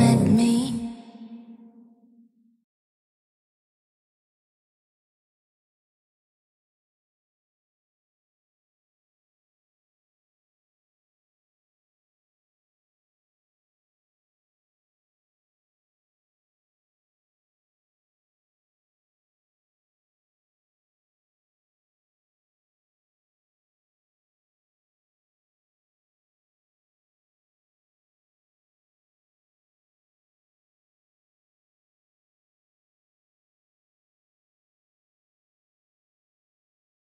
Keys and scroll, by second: 2.1 ctrl+z, 7.2 F3, 7.4 Escape, 8.2 F3, 8.6 Escape, 9.2 shift+F2, 13.7 Caps_Lock, 13.9 h, 14.4 e, 17.1 c, 20.9 Delete, 22.0 Escape, 25.7 c, 27.8 F3, 28.2 Escape, 29.3 shift+Page_Down, 30.3 c, 30.5 shift+F2, 30.7 Escape, 31.1 shift+F2, 31.3 F9, 33.0 Escape, 33.4 shift+F2.